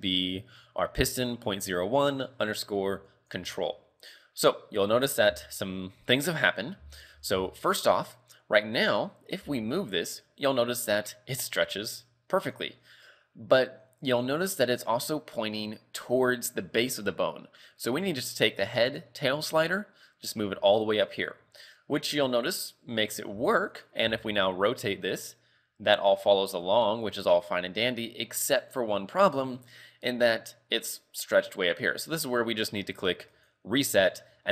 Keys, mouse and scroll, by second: 4.4-4.8 scroll down 2, 4.8-5.6 scroll up 4, 5.6 shift+middle click, 6.1 scroll down 3, 6.8 z, 7.2 z, 7.6 shift+middle click, 7.9 scroll up 2, 8.8 right click, 9.5 g, 14.1 right click, 14.8 right click, 19.8 click, 21.6 scroll down 3, 22.5 right click, 23.3 g, 24.1 r, 28.6 right click, 33.4 click, 34.3-34.5 scroll up 5.